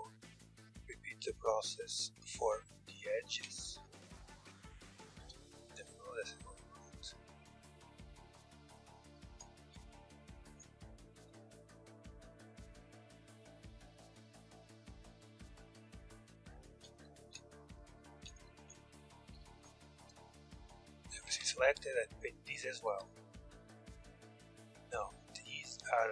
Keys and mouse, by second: 1.6 ctrl+z, 2.5 click, 3.2 ctrl+z, 4.8 ctrl+l, 9.2 ctrl+z, 9.8 ctrl+l, 16.7 ctrl+z, 18.0 ctrl+z, 18.9 ctrl+l, 19.7-21.3 middle drag, 20.8 Tab, 21.3-26.1 drag.